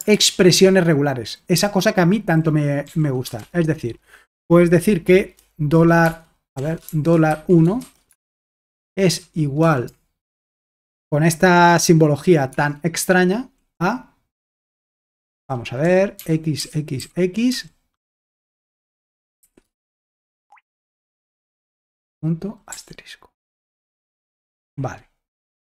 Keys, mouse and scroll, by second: 0.2 alt+Tab, 1.5-3.4 typing, 6.1-8.1 typing, 9.2 typing, 10.4 typing, 12.5 space, 15.3 Escape, 15.6-25.1 typing.